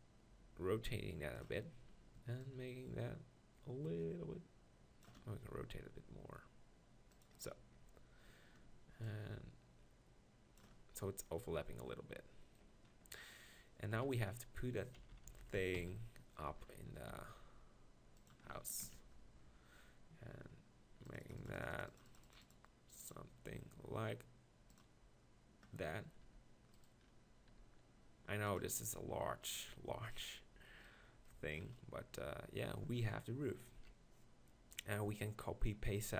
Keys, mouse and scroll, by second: 5.5 r, 7.7 Tab, 13.9 KP_1, 15.0-15.8 KP_4, 17.1 g, 18.8 ctrl+KP_Decimal, 26.2 r, 27.5 r, 28.6 g, 29.7 r, 33.8 KP_1.